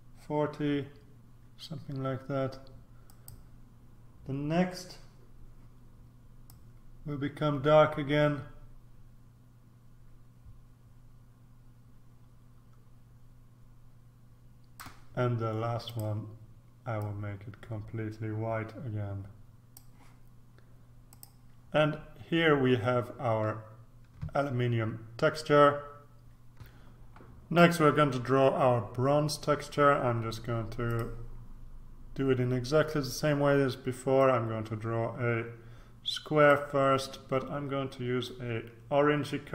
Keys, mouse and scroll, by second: 3.0 click, 6.4-15.3 drag, 15.8 click, 16.9-20.3 drag, 21.1 click, 26.7 ctrl+r, 30.9 click, 34.2-37.1 drag, 38.3-39.5 drag.